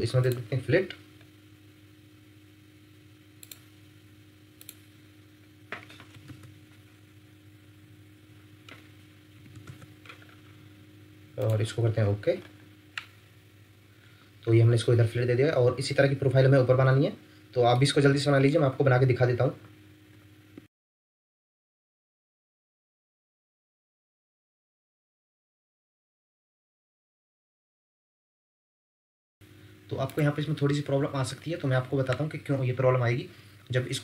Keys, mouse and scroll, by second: 6.1 typing, 6.2 Return, 7.2 scroll down 1, 9.3 typing, 9.6 Return, 12.0-12.8 scroll up 1, 16.7 scroll down 1, 17.7 middle click, 19.2 scroll up 1, 19.6 scroll down 1, 20.5 Escape, 20.9 Escape, 20.9 ctrl+8, 21.1 scroll up 1, 21.1 scroll down 1, 21.3 scroll up 1, 21.4 ctrl+middle click, 22.4 double click, 22.6 typing, 22.8 Return, 24.1 scroll up 1, 25.3-26.1 typing, 26.5 Return, 26.7 Escape, 27.1 shift+click, 27.6 Escape, 28.2 typing, 28.3 Return.